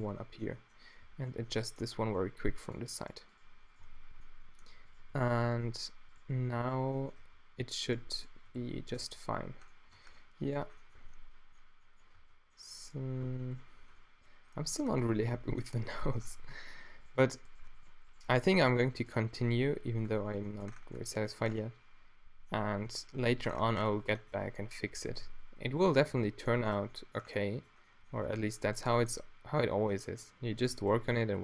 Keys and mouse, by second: 0.0 shift+right click, 2.1 g, 3.9 q, 4.4-5.3 middle drag, 5.4 q, 7.2 q, 8.6 f, 9.0 f, 9.9 Tab, 12.2 Tab, 13.2 Tab, 14.1 middle click, 14.2 drag, 14.6 middle drag, 16.3 Tab, 19.2 q, 19.7 q, 20.1 q, 20.4 Tab, 24.6 Tab, 24.9 a, 25.1 b, 26.0 q, 26.7 Tab, 29.2 Tab, 30.7 a, 30.9 b.